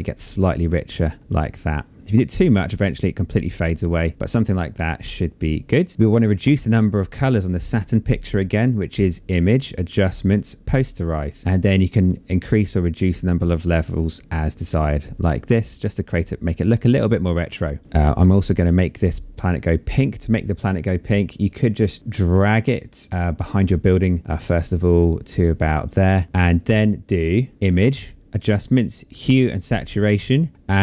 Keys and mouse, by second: 8.2 click, 10.8 click, 12.3 click, 22.0 click, 24.0 click, 27.5 click, 29.4 click.